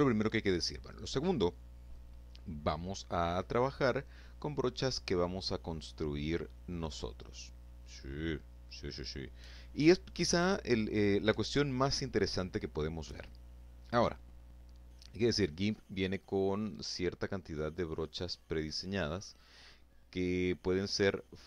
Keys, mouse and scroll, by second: 14.2-15.9 scroll down 2, 15.9-16.8 scroll up 2.